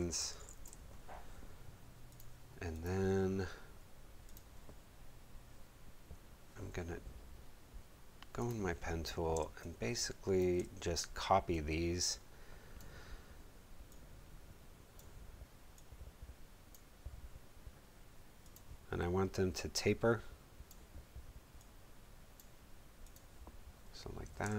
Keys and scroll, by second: 0.0-0.9 typing, 9.3 space, 24.4 space.